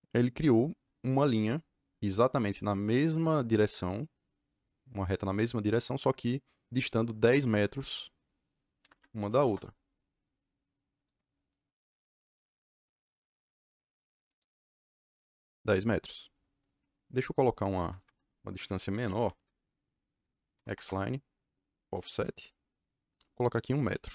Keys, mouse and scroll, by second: 8.7 Escape, 8.9 Escape, 8.9-9.9 typing, 10.9 click, 14.2 click, 17.7 Escape, 17.9 Escape, 19.1 Escape, 19.3 Escape, 20.2-21.8 typing, 22.0 KP_Enter, 23.9 KP_1, 24.0 KP_Enter.